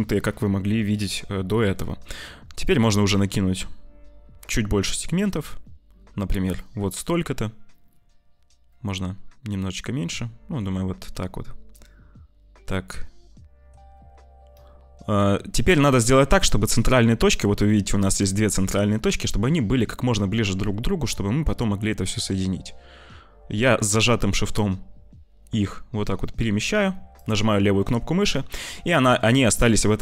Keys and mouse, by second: 28.3 shift+click, 28.9 shift+middle click.